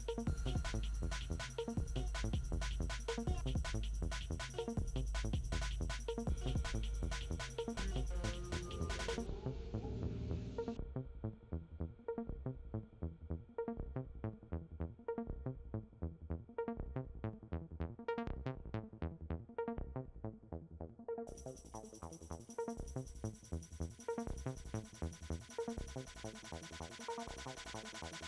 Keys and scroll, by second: 6.9 ctrl+d.